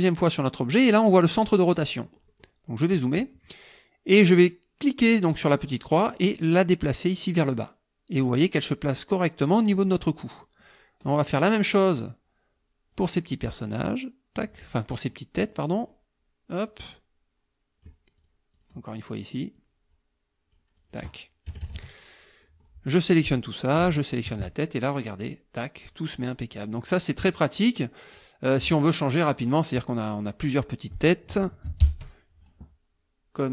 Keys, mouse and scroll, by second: 2.1 click, 2.7 click, 6.1-8.6 drag, 10.1 middle click, 11.1 click, 11.4 click, 11.8 click, 12.9-14.6 drag, 14.7 click, 15.4 click, 15.8 click, 16.7-18.0 drag, 18.2 click, 18.5 click, 19.6-21.1 drag, 21.5 KP_Subtract, 22.4 middle click, 22.9-23.9 drag, 24.1 shift+click, 25.3 click, 25.6 click, 26.2 click, 26.5 click, 27.2 click, 27.6 click, 28.1 click, 29.0 click, 30.3 click, 31.8 ctrl+shift+l.